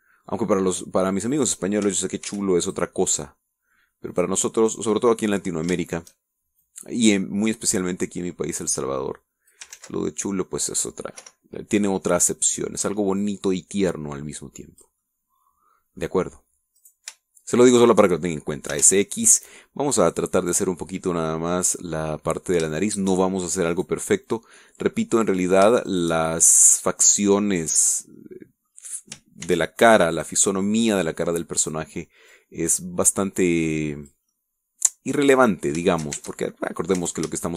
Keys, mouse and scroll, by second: 0.0 ctrl+r, 0.4 ctrl+click, 1.0 middle click, 2.3 click, 3.2 ctrl+r, 3.6 ctrl+click, 5.0 click, 5.6 right click, 5.9 middle click, 6.8 shift+middle click, 7.6 click, 8.3-9.5 scroll up 3, 10.6 ctrl+z, 10.9-12.0 ctrl+middle drag, 12.1 o, 12.8 middle click, 14.2-16.0 drag, 16.0-17.1 middle drag, 17.7 right click, 18.6 shift+right click, 19.6 s, 19.8 x, 21.4-23.4 drag, 23.7 shift+middle click, 24.6 click, 25.2-26.4 drag, 26.8 shift+right click, 27.7-29.0 drag, 29.1 middle click, 30.4 ctrl+r, 30.8 ctrl+click, 31.1 ctrl+click, 31.4 ctrl+middle click, 32.5 right click, 33.2-35.2 drag, 35.4-36.4 middle drag, 36.4 scroll down 1, 36.8 shift+middle click, 37.1 shift+Tab.